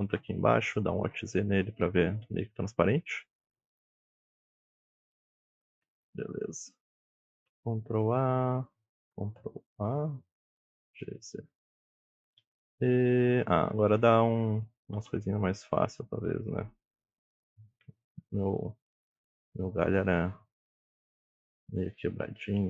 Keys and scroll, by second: 0.4 ctrl+a, 1.4 alt+z, 2.0 KP_1, 3.0 KP_Decimal, 7.7 ctrl+a, 9.3 ctrl+a, 10.4 g, 10.8 z, 12.1 e, 15.0 e, 18.8 e.